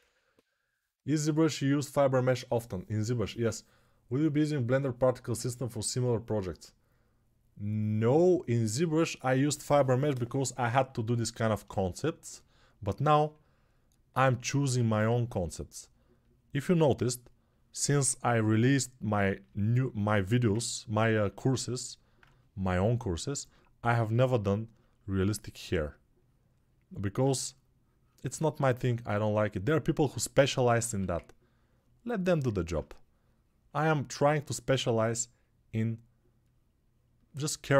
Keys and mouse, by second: 21.3 alt+q, 24.4 alt+q, 30.6 1, 32.6-37.7 shift+drag.